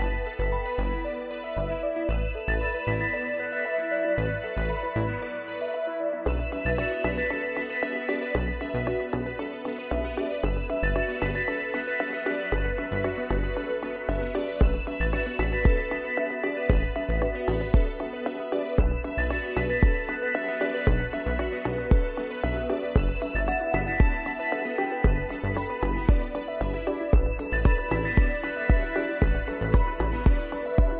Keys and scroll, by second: 10.5 ctrl+z.